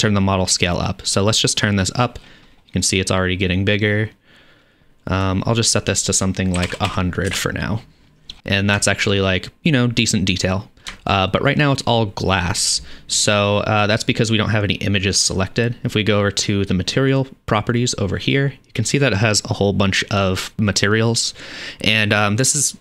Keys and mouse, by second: 0.7-7.5 drag, 6.9 KP_0, 7.5 KP_Decimal, 10.8-17.2 shift+drag, 17.2-22.8 middle drag.